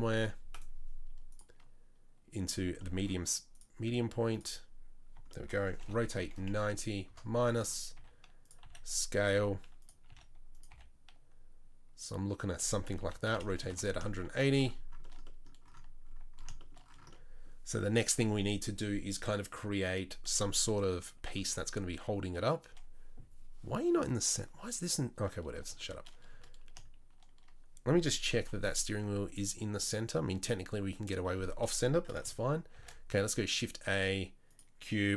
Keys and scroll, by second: 5.8 r, 8.0-10.7 typing, 13.0 r, 21.3 KP_3, 21.6 KP_1, 28.3 n, 32.8 shift+a.